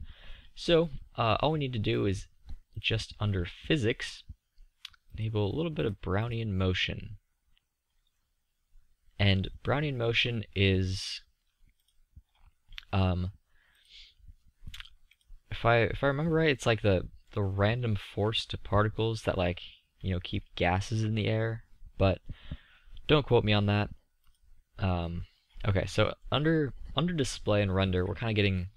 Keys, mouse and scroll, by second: 0.9-3.0 middle drag, 3.0-6.4 drag, 6.4-11.7 middle drag, 12.9-17.8 drag, 17.8-18.5 middle drag, 22.4-25.4 middle drag.